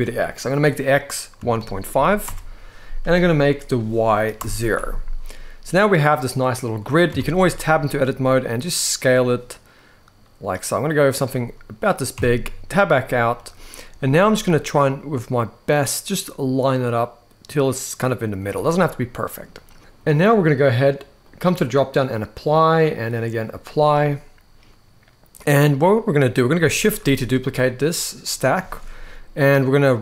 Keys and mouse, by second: 0.0-2.0 drag, 3.3 click, 6.8 Tab, 7.5 s, 11.8 Tab, 13.0 g, 18.0 click, 18.5-19.1 middle drag, 21.0-21.6 drag, 22.2-23.1 drag, 23.8-25.6 middle drag, 26.5 shift+d, 28.3-29.5 right drag.